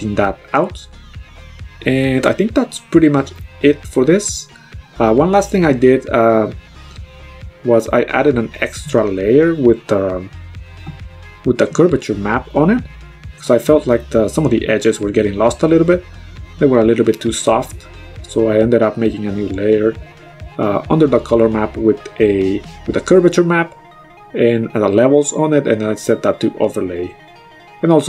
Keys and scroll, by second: 1.7 x, 4.3 ctrl+z.